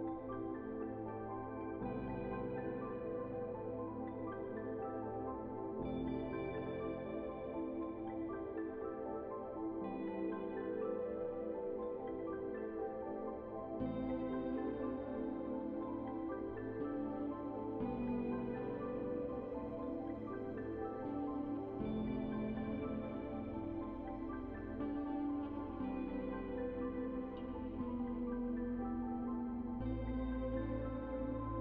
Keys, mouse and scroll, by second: 3.1 1, 3.5 Return, 4.9-11.0 drag, 11.1 ctrl+right click, 11.8 click, 12.8-13.3 scroll down 1, 13.3 click, 14.8 alt+click, 15.7 click, 19.9 right click, 20.9-30.8 drag, 31.3 right click.